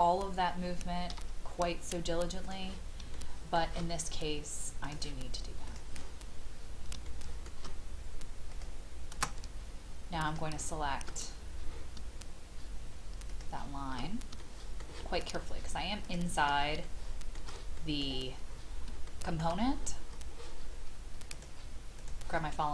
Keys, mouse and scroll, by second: 2.4 click, 3.1 shift+middle click, 4.8 click, 7.0 shift+middle click, 8.5 click, 13.3 shift+click, 14.4 shift+middle click, 16.0 shift+click, 16.8 shift+middle click, 17.8 middle click, 18.4-18.8 scroll up 1, 19.0 shift+middle click, 19.7 scroll up 1, 21.3-22.7 drag.